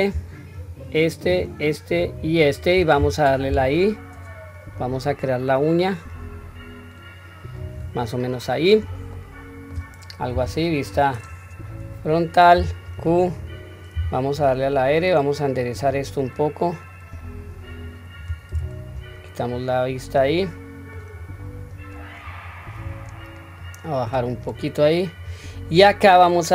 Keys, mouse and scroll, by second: 0.5 shift+click, 1.3 shift+click, 2.0 shift+click, 3.5 i, 8.0-8.8 middle drag, 9.1-9.8 middle drag, 10.3 KP_1, 10.9 scroll up 1, 12.5 q, 13.9 r, 19.2 scroll down 1, 19.4-20.9 middle drag, 21.7 scroll down 1, 22.8 click, 24.7 click.